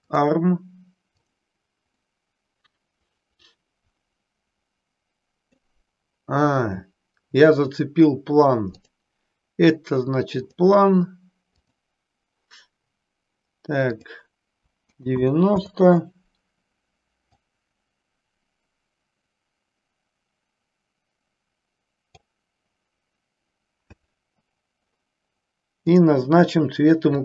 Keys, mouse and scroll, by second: 1.1 click, 2.0-5.7 middle drag, 8.8-10.7 drag, 11.7 click, 14.0-16.0 drag, 17.6-22.3 drag, 25.9 click.